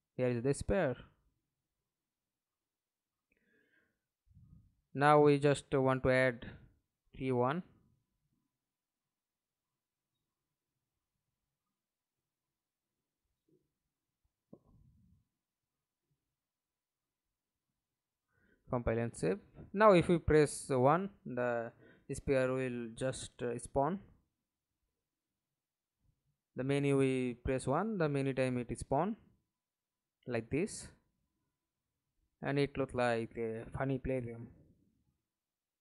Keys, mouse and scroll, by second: 0.0-1.0 typing, 2.2 1, 5.2 Escape, 5.6 middle click, 6.6 F11, 10.5 right click, 11.3-12.5 typing, 13.2 Down, 13.8 Return, 17.3 alt+click, 19.0 double click, 20.2 F11, 20.7 alt+p, 21.9-25.5 typing, 27.0 1, 28.9-30.8 typing, 33.7 1, 34.0 1, 34.2 1, 34.5 1.